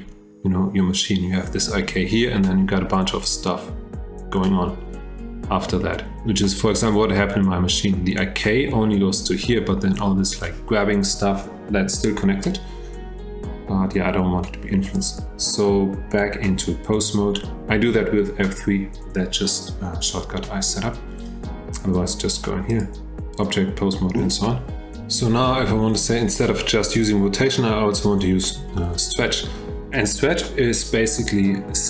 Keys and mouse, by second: 14.9 click, 16.1 F3, 22.7-23.8 drag, 28.8-29.3 shift+middle drag.